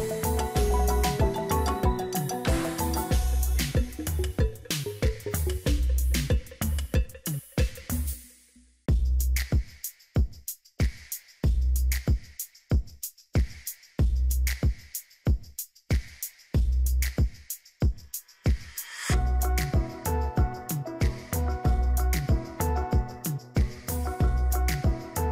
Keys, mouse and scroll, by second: 11.9 double click, 12.7 double click, 19.6 ctrl+d, 22.7 double click.